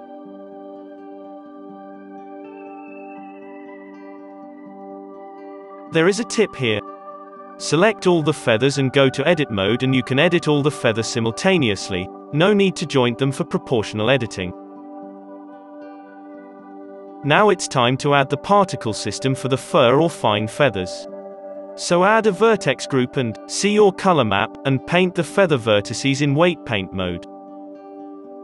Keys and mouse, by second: 1.0-5.5 middle drag, 5.5 click, 5.5 z, 6.8 alt+a, 6.8 click, 7.5-10.3 typing, 8.6 Tab, 9.0-11.4 drag, 11.8 r, 12.1 g, 12.7 Tab, 13.0 Tab, 13.4-15.6 drag, 13.4 g, 14.1 ctrl+z, 14.3 g, 14.7 Tab, 15.6 alt+a, 16.8 ctrl+s, 21.8 Tab, 21.9 z, 24.6 3, 26.3 KP_3, 26.6-28.4 middle drag, 26.8 Tab, 26.8 z.